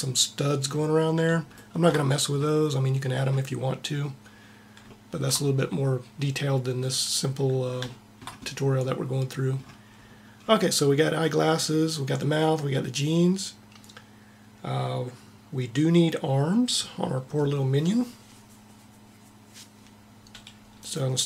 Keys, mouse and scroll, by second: 9.6-12.3 middle drag, 20.5-21.2 right drag.